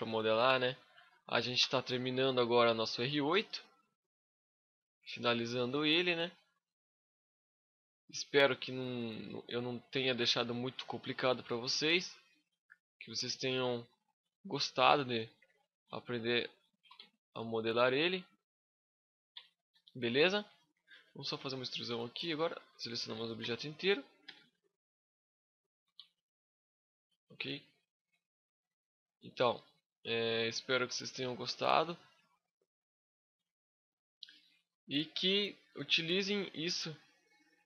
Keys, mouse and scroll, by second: 1.7 middle click, 3.1 KP_5, 3.7 middle click, 4.3 middle click, 4.6 scroll up 1, 5.1 middle click, 5.7 alt+right click, 6.5 click, 7.8 scroll up 1, 7.9 middle click, 9.8 click, 11.5 alt+right click, 12.1 click, 14.4 shift+middle click, 15.0 alt+right click, 15.5 click, 16.7 Tab, 16.9-17.2 scroll down 5, 17.1 scroll up 1, 17.2 middle click, 19.3 middle click, 20.1 scroll up 3, 20.3 shift+middle click, 20.7 middle click, 20.7 scroll up 1, 21.1 a, 21.5 a, 22.3 right click, 23.1 l, 24.0 e, 24.3 right click, 24.6 click, 25.7 Tab, 26.0 scroll down 3, 26.2 middle click, 27.8 scroll down 4, 28.1 middle click, 29.3 scroll down 1, 29.8 middle click, 31.6-32.4 scroll up 12, 32.6 middle click, 33.2 shift+middle click, 33.8 middle click, 34.5 scroll down 1, 34.6 Tab, 35.8 right click, 36.3 shift+right click, 36.7 middle click.